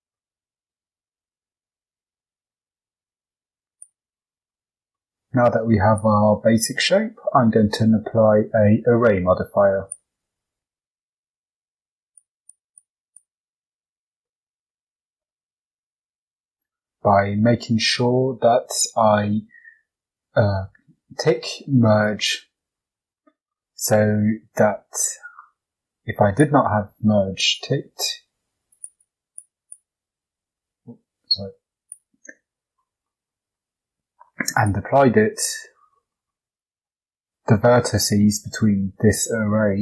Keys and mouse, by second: 1.5 e, 2.3 g, 4.7 Tab, 4.9 middle drag, 5.8-9.9 drag, 12.0 click, 12.4 click, 12.7 click, 13.1 click, 14.2 shift+middle drag, 14.7-16.5 middle drag, 21.9 click, 23.8 shift+middle click, 25.6 shift+d, 27.4 click, 28.6 click, 28.9 click, 29.3 click, 29.6 click, 30.1 Tab, 31.7 click, 32.3 Tab, 33.0 shift+middle click, 33.8 Tab, 34.5 click, 35.1 Tab, 35.4 click, 35.9 shift+middle click, 36.5 right click, 36.9 g.